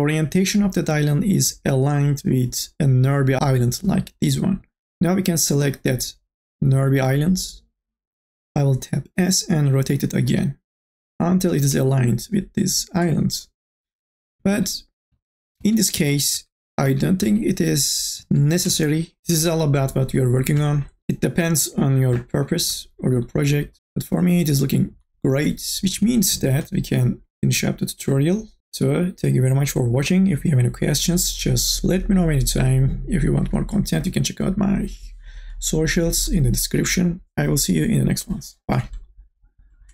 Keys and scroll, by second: 14.7 ctrl+z.